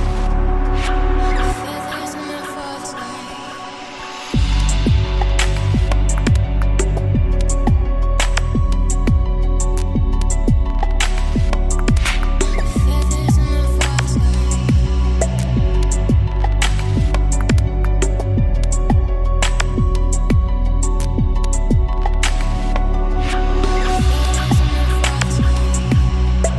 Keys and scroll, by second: 0.8 BackSpace, 1.4 p, 2.1 BackSpace, 2.5 p, 3.8 BackSpace, 5.2 p, 6.6 Return, 11.4 Delete, 23.6 ctrl+s.